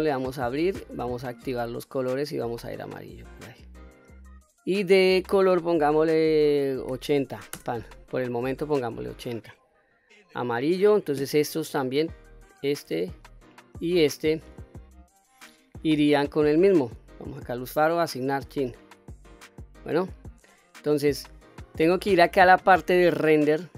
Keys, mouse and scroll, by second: 5.1-8.3 drag, 8.9-9.4 scroll down 1, 9.4 middle click, 10.5-11.4 scroll up 2, 11.4 middle click, 12.5 click, 13.6 shift+click, 14.2 scroll down 2, 14.9-16.3 scroll up 7, 16.8-17.4 scroll down 2, 17.7 click, 18.4 click, 19.0-19.3 scroll down 2, 19.4 middle click, 20.2-20.6 scroll up 1, 20.6 middle click, 22.6 click.